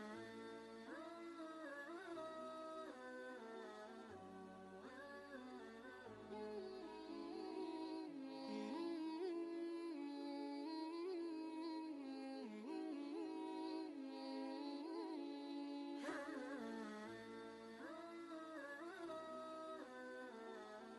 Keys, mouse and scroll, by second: 10.5 click, 10.7 ctrl+space, 11.1 ctrl+click, 11.3 ctrl+space, 12.5 ctrl+click, 17.1 ctrl+space, 17.3 ctrl+click, 17.7 ctrl+space, 18.3 click.